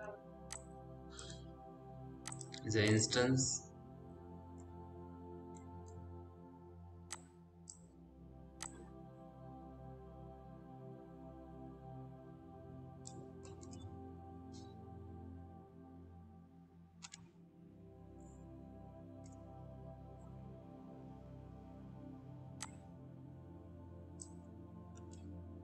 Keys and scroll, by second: 3.0 f, 14.2 p, 15.8 z, 16.7 F3.